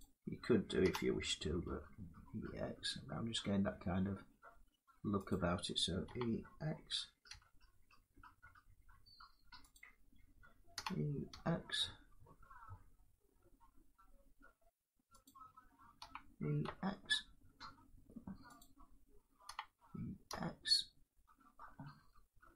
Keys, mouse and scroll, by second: 1.3 e, 5.0 click, 5.8 e, 7.0 x, 9.4 click, 10.4 e, 11.0 x, 14.9 click, 15.7-16.3 typing, 18.3 click, 19.2 e, 21.7-22.5 drag.